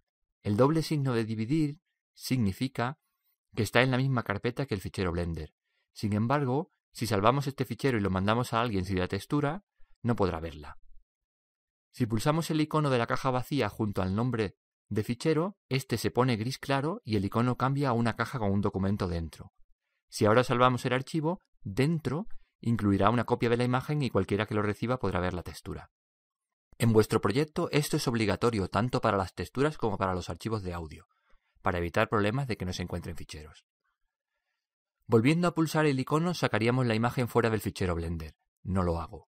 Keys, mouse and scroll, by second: 14.8-16.6 drag.